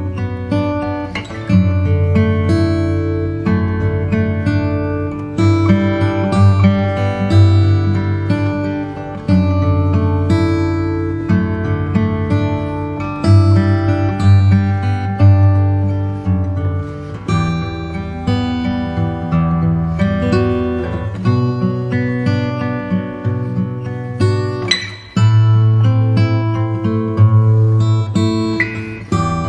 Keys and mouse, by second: 0.8 s, 8.1 ctrl+r, 10.7 s, 19.1 click, 21.3 s, 23.9 click, 26.0 click, 29.3 click.